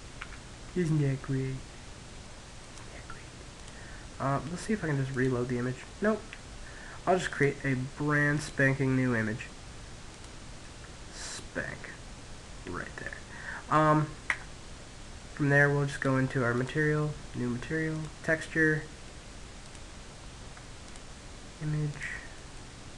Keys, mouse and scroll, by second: 1.1-3.9 drag, 5.7 click, 12.5 Tab, 14.2-21.1 drag, 17.1-18.9 middle drag, 20.7 middle click, 21.6 click.